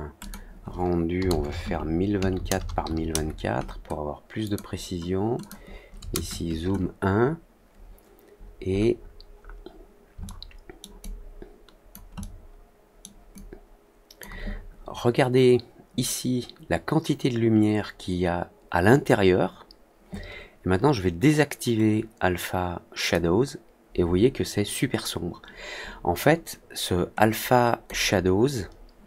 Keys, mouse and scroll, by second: 0.1 click, 4.4 click, 5.3 click, 8.3-9.5 scroll up 4, 9.1 middle click, 10.2 alt+middle click, 10.9 alt+click, 12.1 alt+middle click, 13.3 alt+click, 23.0 click, 27.1 click.